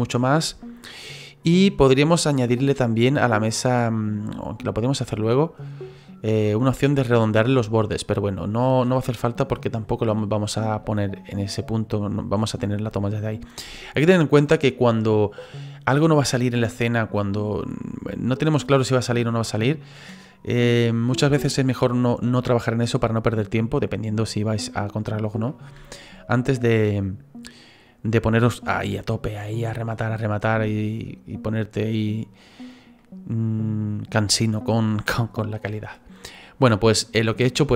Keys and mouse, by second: 0.9 middle click, 9.5 click, 26.5 click, 33.0 middle click.